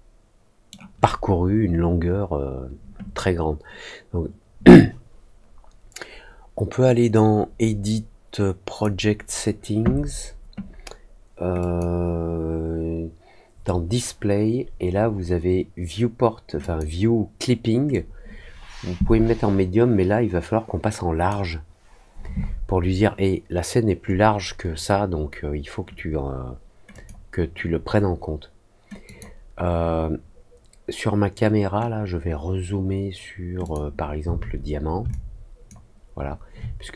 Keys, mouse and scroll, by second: 7.1-8.7 drag, 11.5 click, 16.5 click, 17.8-21.2 drag, 26.9 click, 29.0 click, 33.6 click, 35.0 alt+click, 36.1 alt+middle click.